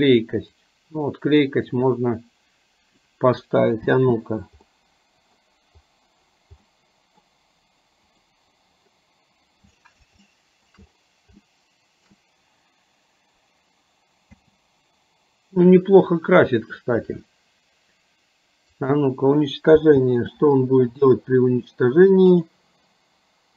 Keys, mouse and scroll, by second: 0.7-3.2 drag, 3.9 space, 4.8-5.6 middle drag, 6.8-7.3 middle drag, 8.4 drag, 10.4-10.9 shift+middle drag, 11.6-12.4 shift+middle drag, 14.4 space, 20.2 space, 22.7 click.